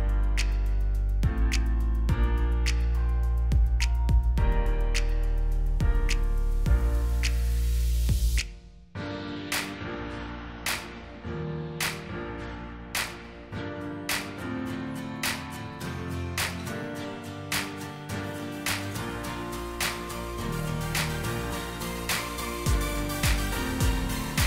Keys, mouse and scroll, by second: 3.1 alt+click, 12.3 4, 13.0 Return, 19.2 alt+click, 24.0 shift+click.